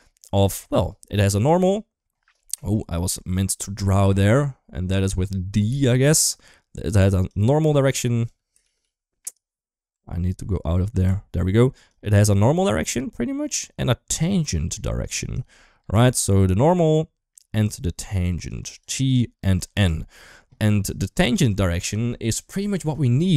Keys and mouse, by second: 1.2 middle click, 2.3 KP_1, 2.7 KP_3, 5.5-7.0 d, 7.0 click, 7.5 d, 7.6 d, 7.7 click, 8.1 d, 8.5 ctrl+z, 8.7 ctrl+z, 9.8 Tab, 10.8-20.9 typing, 11.7 click, 12.6 click, 14.0 click, 15.1-15.7 drag, 18.2 drag, 18.6 click, 19.3 click, 23.2 shift+middle drag.